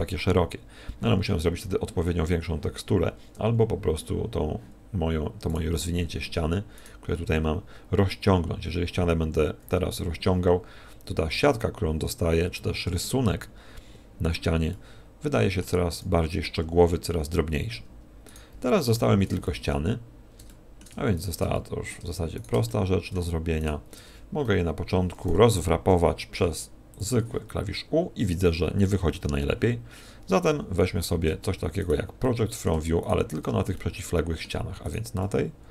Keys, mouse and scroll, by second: 5.5 right click, 6.7 right click, 8.0 a, 9.2 a, 9.7 s, 14.7 middle click, 15.9 a, 16.6 z, 18.3 right click, 18.7 middle click, 19.4 shift+middle click, 20.5 middle click, 21.1 shift+right click, 21.5 middle click, 22.3 shift+right click, 22.6 middle click, 23.6 shift+right click, 24.4 KP_1, 25.9 u, 30.5 u, 31.8 right click, 32.2 middle click, 33.0 shift+right click, 33.7 middle click, 34.8 right click, 35.2 middle click.